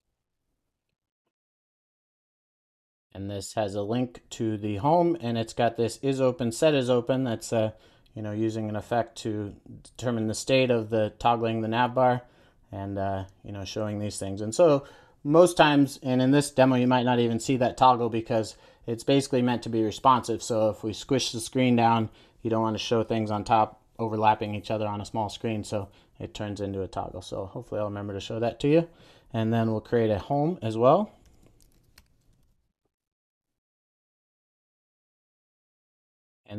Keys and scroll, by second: 1.7 Return, 2.8 super+s, 31.4 super+n, 35.5 Return, 36.0 super+s.